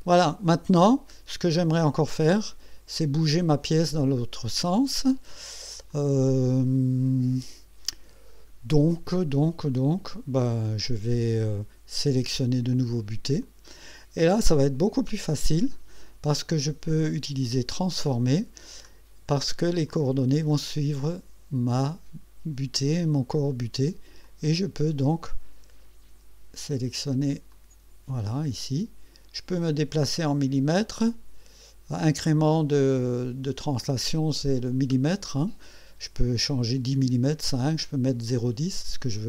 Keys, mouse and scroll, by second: 0.0 scroll up 2, 0.7 right click, 1.6 click, 2.0-3.2 drag, 5.9 click, 7.1 scroll up 1, 7.9-8.2 scroll down 2, 13.4 click, 14.0 click, 16.6 right click, 17.7 click, 18.8-19.5 scroll down 4, 19.9-21.4 drag, 24.2-26.4 drag, 27.5-33.8 drag.